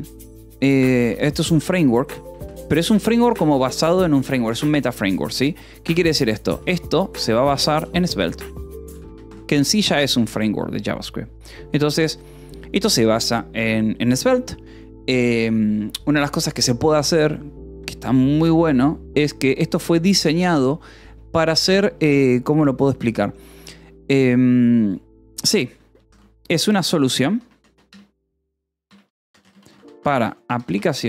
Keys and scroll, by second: 0.9-3.2 typing, 4.1 ctrl+s, 5.6-10.5 typing, 11.9 o, 26.3-31.0 typing.